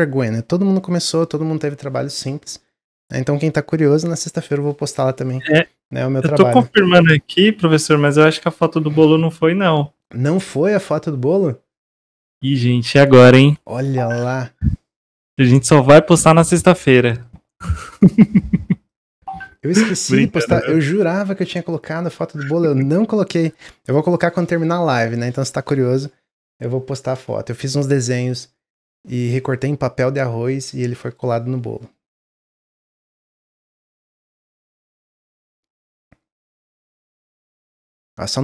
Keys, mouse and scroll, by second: 37.7-38.4 middle drag.